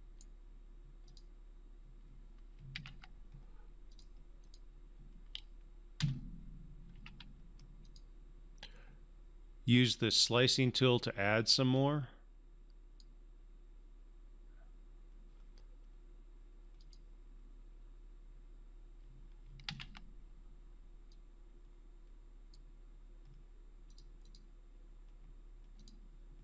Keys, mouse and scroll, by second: 1.1 click, 2.7 ctrl+z, 4.0 click, 6.0 Escape, 6.9 q, 7.8-13.0 drag, 16.8 click, 19.6 ctrl+z, 21.1-22.6 drag.